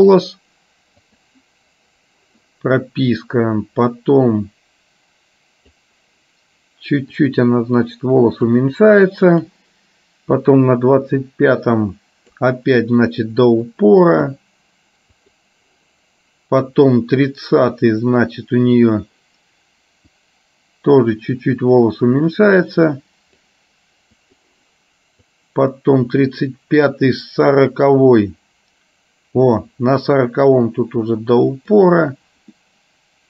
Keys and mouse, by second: 1.2 click, 3.4-5.9 drag, 7.3-8.5 drag, 10.5-12.7 drag, 13.9 click, 16.9-19.0 drag, 20.2-23.5 drag, 24.4 click, 25.4-29.5 drag, 30.8-31.8 drag, 32.7 middle click.